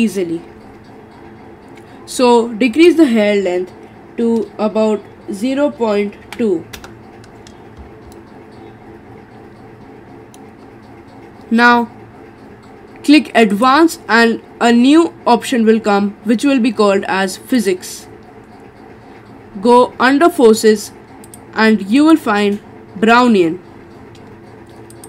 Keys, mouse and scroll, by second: 2.7-5.9 drag, 7.8-8.1 scroll up 4, 8.1-10.6 middle drag, 10.6-13.6 scroll down 3, 13.6 click, 17.6-18.6 drag, 18.6-19.6 scroll down 2, 19.6-21.3 scroll down 1, 21.3-25.0 drag.